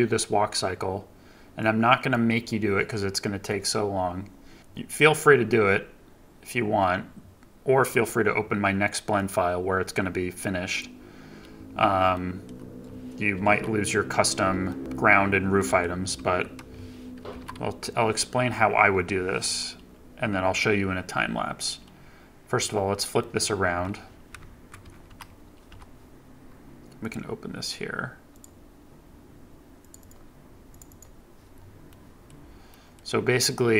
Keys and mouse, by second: 15.5 middle drag, 16.1 KP_3, 23.1 middle click, 23.6 KP_9, 24.3 KP_1, 24.7 KP_3, 25.0 KP_9, 31.9 click, 32.6 click.